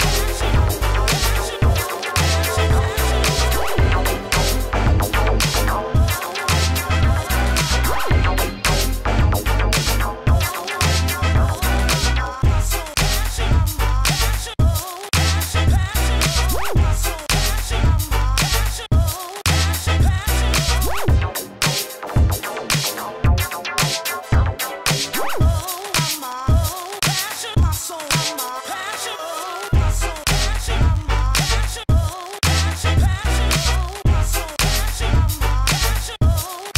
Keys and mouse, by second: 3.4 s, 3.5 f, 3.8 s, 4.6 shift+f, 5.7 s, 6.9 s, 7.8 s, 7.9 f, 8.4 f, 10.0 f, 11.2 f, 12.0 s, 12.1 f, 12.4 f, 13.5 s, 13.7 f, 14.9 s, 15.6 ctrl+z, 16.0 shift+f, 16.3 drag, 18.4 f, 22.3 s, 23.9 f, 24.1 Tab, 24.4 Tab, 25.2 shift+f, 27.5-29.5 drag, 29.5 s, 30.6 click, 31.0 click, 31.2-31.5 ctrl+z, 31.8 s, 33.0 s, 33.7 Tab, 34.4 g, 35.1 Tab.